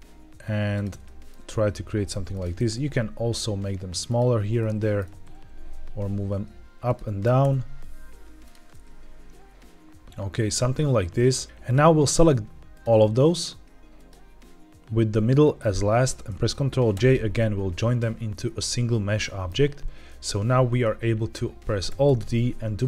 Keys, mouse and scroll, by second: 0.6 ctrl+click, 0.9 middle click, 1.4 s, 2.2 click, 2.5 g, 4.0 ctrl+click, 4.5-4.9 middle drag, 5.0 g, 5.0 z, 5.2 z, 6.8 click, 7.1 r, 7.3 r, 8.3 drag, 8.6-10.4 middle drag, 11.5 shift+click, 12.0 shift+click, 12.6 shift+click, 13.2 shift+click, 13.8 shift+click, 15.5 shift+click, 17.0 ctrl+j, 17.9-19.4 middle drag, 20.0 middle click, 21.9 alt+d.